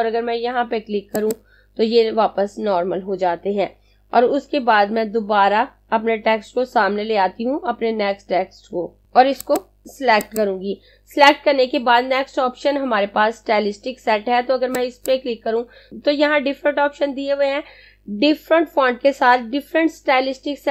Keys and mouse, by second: 0.4 click, 9.0 space, 9.6 click, 14.7 click.